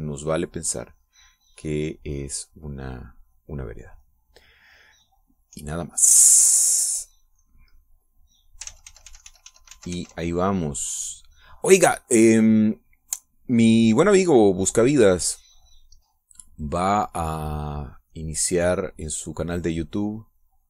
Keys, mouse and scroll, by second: 4.5-6.3 middle drag, 8.0-9.3 drag, 9.5 ctrl+z, 12.5-17.5 drag, 19.0-20.6 drag.